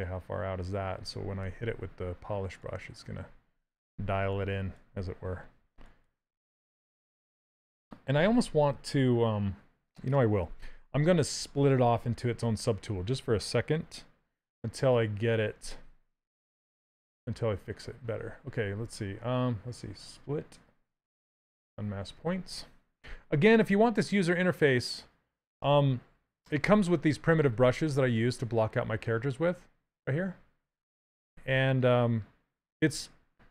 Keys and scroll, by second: 15.3 2, 23.2 Down.